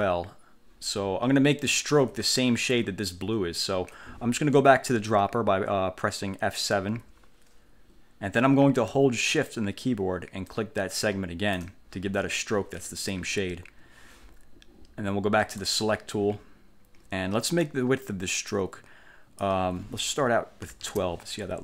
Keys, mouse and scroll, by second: 1.9 ctrl+scroll up 2, 7.0 F7, 10.6-11.9 shift+drag, 15.7 click, 18.6 click, 20.5-21.4 typing.